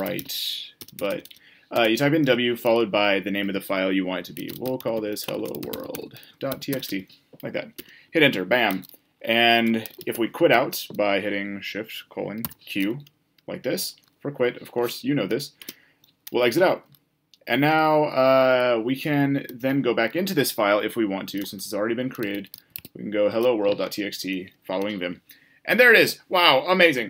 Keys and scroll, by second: 10.4 typing.